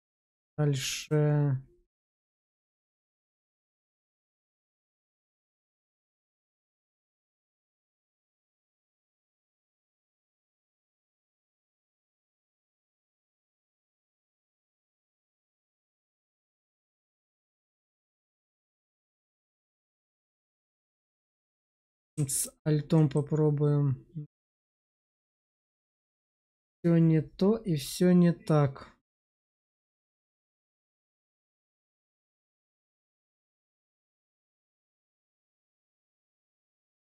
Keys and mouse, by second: 0.0 Tab, 3.0 shift+click, 3.2 shift+click, 5.1 ctrl+b, 10.4 shift+click, 10.8 Tab, 11.3 middle click, 11.9 q, 13.3-14.4 middle drag, 16.6-19.8 drag, 20.7 q, 23.0-25.7 middle drag, 33.0 middle click, 33.9 shift+middle click, 34.4-37.0 middle drag.